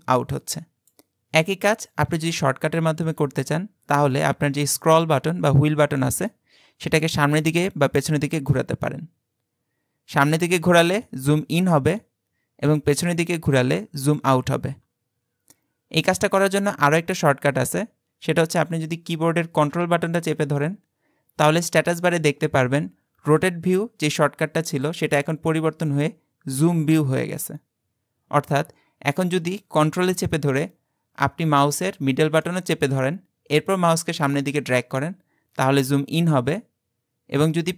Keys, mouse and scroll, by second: 7.6-8.2 scroll up 1, 8.2-8.6 scroll up 1, 10.3-12.7 scroll up 5, 13.0-17.6 scroll down 5, 32.5-35.5 ctrl+middle drag.